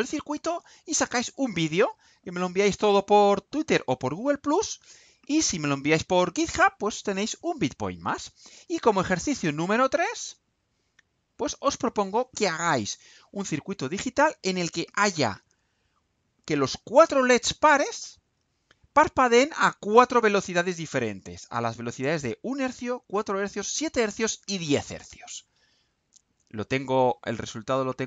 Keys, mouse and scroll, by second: 11.1 click.